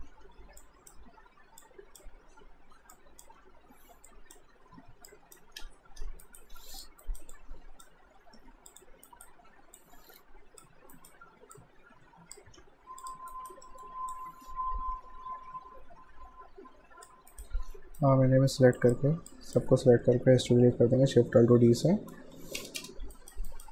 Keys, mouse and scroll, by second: 0.1 Return, 0.6 click, 3.4 Return, 4.1 click, 5.6 Return, 6.2 alt+right click, 6.6 q, 6.8 right click, 7.0 alt+right click, 7.4 alt+click, 8.2 alt+shift+d, 8.7 click, 9.1 alt+right click, 9.8 alt+click, 11.0 alt+right click, 11.6 alt+click, 12.6 q, 13.0 click, 13.3 alt+right click, 13.7 alt+middle click, 14.1 alt+click, 17.3 alt+right click, 18.8 click, 21.5 alt+shift+d, 21.9 alt+middle click, 22.4 q, 22.6 space, 23.2 alt+right click.